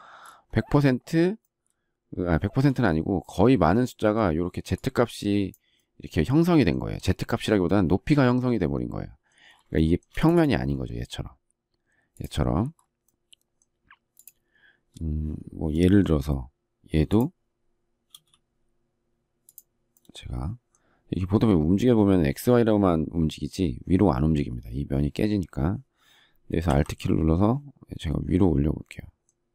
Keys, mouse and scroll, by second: 9.7 shift+middle click.